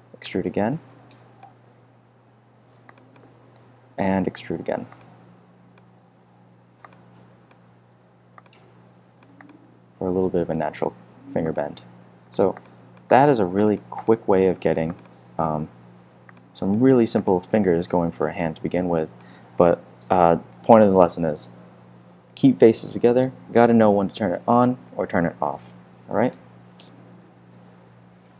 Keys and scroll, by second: 2.4 f, 4.1 super+g, 5.8 e, 7.5 w, 15.1 super+f, 15.7 f.